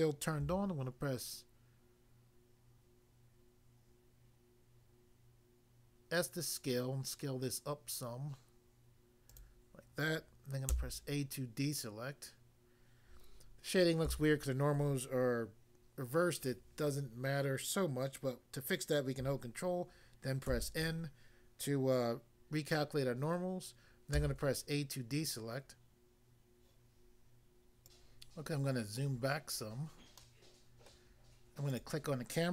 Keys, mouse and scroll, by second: 0.5 s, 9.3 click, 10.7 a, 14.0 a, 20.5 ctrl+n, 24.1 a, 27.8 click, 28.3 scroll down 1, 30.3 middle click, 30.9 middle click, 31.7 click, 31.8 click.